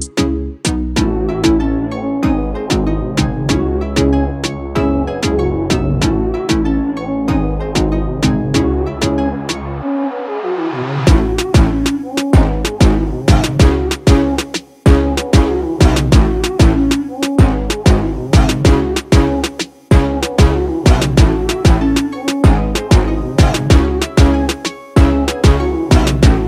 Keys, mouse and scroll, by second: 1.7 click, 4.7-12.2 drag, 10.7 click.